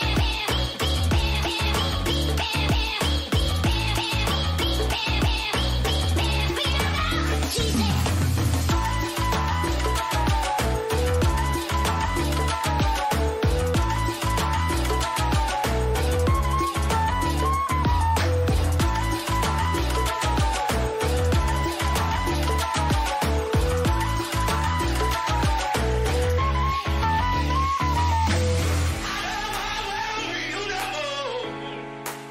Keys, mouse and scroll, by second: 30.7-32.3 middle drag.